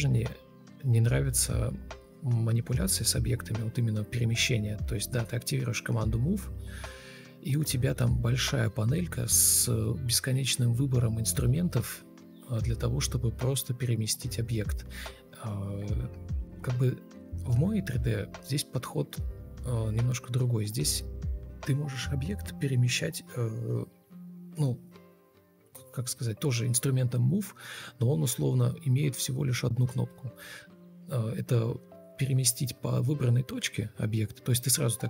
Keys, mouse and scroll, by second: 1.0 Escape, 8.7 Delete, 9.6 Delete, 11.8 alt+e, 12.9 alt+e, 16.0 ctrl+space, 17.8 alt+scroll up 1, 18.2-19.8 typing, 20.1 ctrl+space, 23.0 Delete, 27.1 Return, 27.4-28.7 typing, 32.7 1, 32.8 Return.